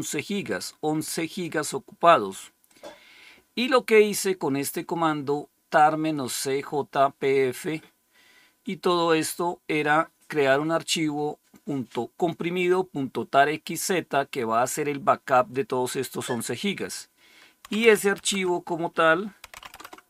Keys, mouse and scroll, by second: 0.4-1.9 drag, 2.5 click, 16.6 click, 17.5-19.9 typing.